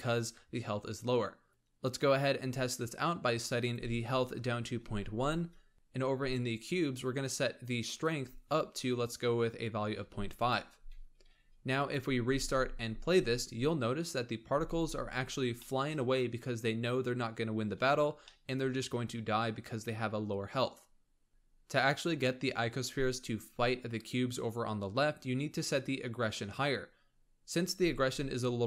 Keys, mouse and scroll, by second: 3.5-5.2 drag, 5.7 click, 7.8-10.4 drag, 11.6-12.1 drag, 12.1 space, 13.0 scroll down 2, 13.9-14.4 scroll up 1, 14.4 space, 15.5-21.2 shift+middle drag.